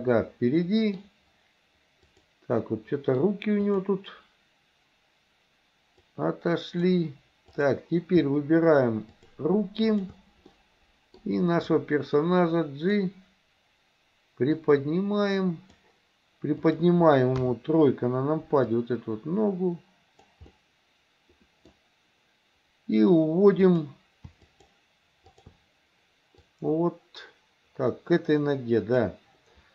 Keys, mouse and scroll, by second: 0.1-1.1 middle drag, 2.1 click, 2.7 middle click, 6.2 click, 7.6 click, 9.1 shift+click, 10.0 shift+click, 10.5 middle click, 11.7-13.0 drag, 14.7-15.9 drag, 16.6 click, 17.4 KP_3, 18.8-20.4 drag, 20.6-21.8 middle drag, 23.7 click, 24.4 shift+click, 25.3 shift+click, 26.7-29.1 drag.